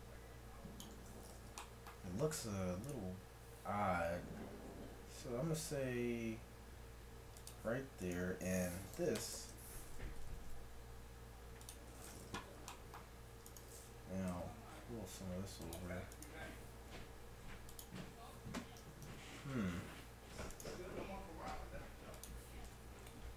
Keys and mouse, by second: 0.2-2.9 middle drag, 3.3 middle click, 3.8 right click, 3.8 r, 8.1-9.9 drag, 8.7 s, 10.2 g, 13.5-14.7 right drag, 14.3 g, 15.1 right click, 16.1-17.9 right drag, 16.8 r, 18.9 ctrl+z, 19.1 ctrl+z, 20.5-22.3 drag, 20.9 r, 22.7 Tab.